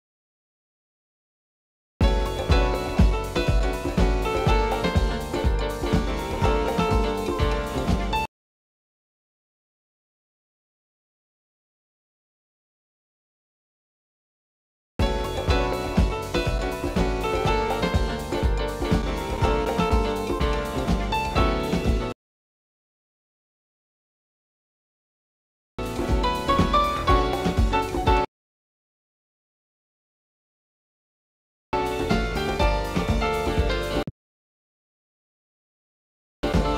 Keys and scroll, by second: 0.0-3.6 typing, 13.4 u, 23.1 h.